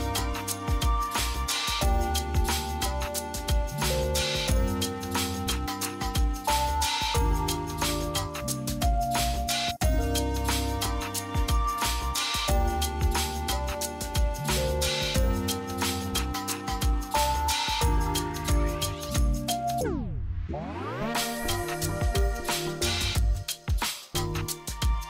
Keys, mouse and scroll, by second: 0.0-1.8 drag, 3.9 click, 6.7 ctrl+r, 7.6 F4, 8.9-10.3 drag, 10.3 right click, 11.3 click, 13.3 F4, 14.0-25.0 drag.